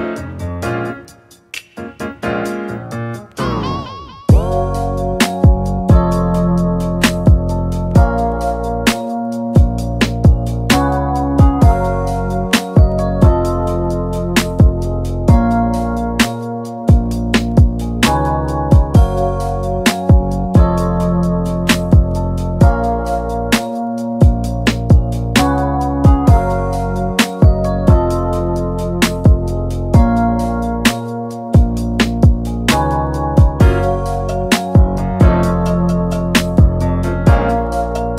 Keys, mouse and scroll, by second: 0.9 click, 1.8-2.9 scroll down 3, 2.9-6.1 drag, 6.5-7.6 middle drag, 7.6-8.3 scroll up 2, 8.3 drag, 9.3 shift+click, 9.8 ctrl+a, 12.1-12.4 drag, 13.2 click, 15.1 click, 15.7 ctrl+shift+d, 16.2 click, 16.8 ctrl+shift+d, 17.6 click, 18.0 middle click, 18.9 scroll down 3, 22.4-23.5 drag, 23.5-24.6 middle drag, 24.6-25.9 scroll up 2, 25.9-27.0 middle drag, 27.0-30.0 scroll down 3, 30.0 click, 30.5-33.8 middle drag, 35.6-37.8 drag.